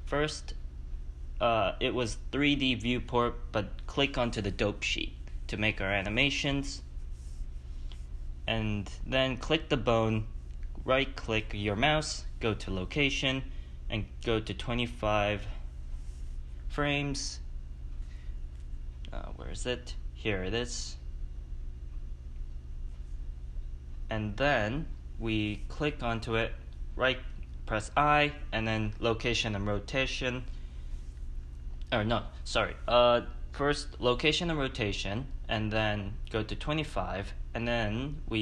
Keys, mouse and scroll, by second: 9.6 click, 12.0 i, 13.8-25.1 drag, 25.1 ctrl+z, 26.2 a, 28.7 i, 29.7 ctrl+z, 30.6-33.8 drag, 33.8 i, 35.4-38.3 drag.